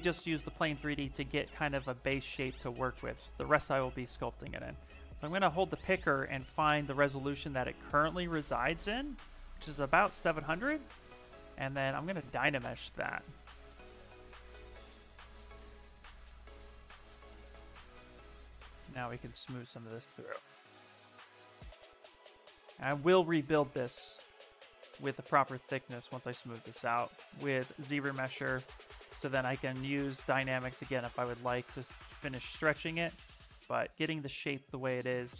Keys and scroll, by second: 14.6 shift+f, 15.5 s, 25.4 s.